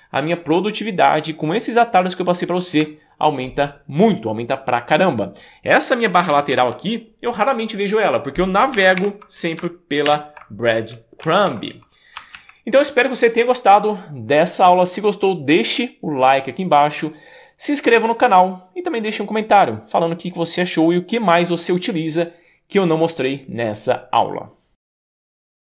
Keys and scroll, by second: 0.0 Up, 0.1 Up, 0.2 Up, 0.3 Up, 0.3 Up, 0.4 Up, 0.5 Up, 0.6 Up, 1.1 Up, 1.5 Up, 1.6 Up, 1.7 Up, 1.8 Up, 1.8 Up, 1.9 Up, 2.0 Up, 2.1 Up, 2.2 Up, 2.3 Up, 2.4 Up, 2.4 Up, 2.5 Up, 6.3 super+k, 6.6 super+b, 8.8 super+k, 9.0 super+b, 10.1 shift+super+., 11.3 alt+Left, 12.4 alt+Right.